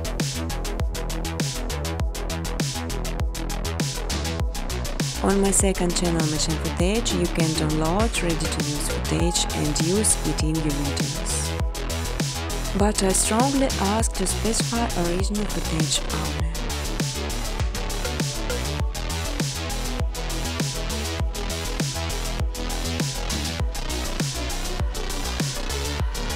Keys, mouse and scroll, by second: 0.3 click, 0.8 click, 1.9 click, 3.6 click, 4.8 click, 5.5-5.9 typing, 6.5 click, 7.8 click, 8.7 click, 10.1 click, 11.0 click, 12.0 space, 14.6 space, 14.8 space, 17.2 space, 17.5 space, 18.2 space, 24.9 click, 25.3 ctrl+z.